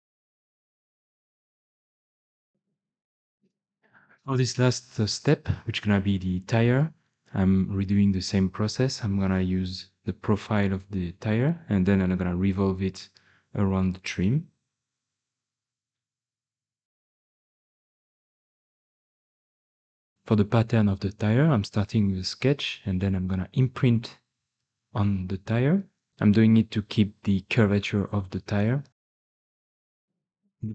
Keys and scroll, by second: 0.0-1.9 typing, 2.4 ctrl+s, 2.4 alt+Tab.